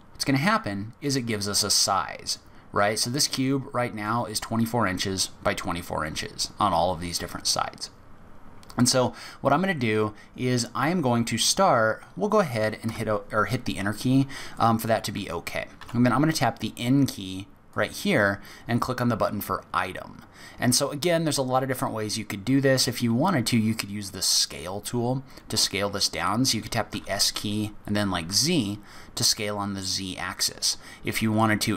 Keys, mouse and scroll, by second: 4.1 middle click, 12.4 click, 12.8 Return, 14.5 click, 15.8 n, 17.7 click, 22.3-22.8 scroll down 2, 22.8-23.2 scroll up 2, 26.9 s.